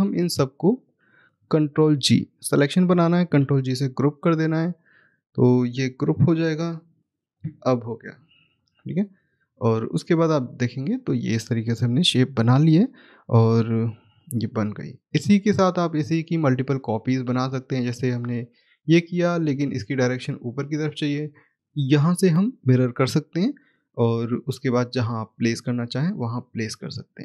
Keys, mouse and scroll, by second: 2.0 ctrl+h, 7.0 ctrl+g, 9.4 click, 14.4-15.5 scroll down 1, 15.5 middle click, 16.6 click, 17.7 right click, 18.5-19.3 scroll up 1, 19.3-21.9 scroll down 1, 21.9 click, 24.1 click, 25.9 scroll down 1, 26.6 middle click.